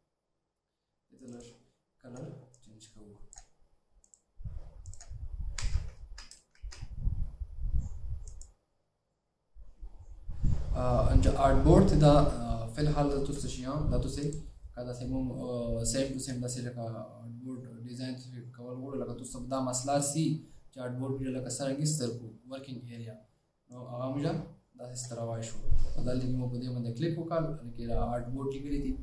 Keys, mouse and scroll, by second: 1.6 double click, 5.7 alt+scroll down 1, 6.8 alt+scroll down 2.